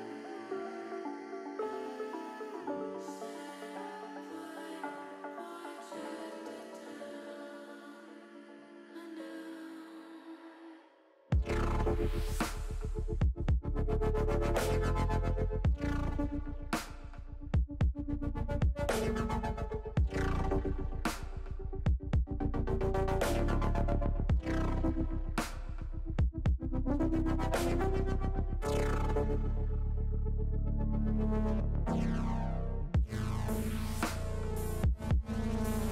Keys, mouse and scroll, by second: 3.6 click, 4.2 click, 4.3 click, 4.5 click, 4.7 click, 4.8 click, 6.5 click, 6.9 click, 7.4 click, 8.8-11.2 drag, 13.1 shift+middle click, 14.8-20.3 drag, 21.5 shift+middle click, 23.0 middle click, 24.3 middle click, 26.4 ctrl+r, 28.8 click, 29.5 middle click, 32.3 alt+shift+click, 32.7 alt+shift+click, 34.6 alt+shift+click, 35.1 middle click.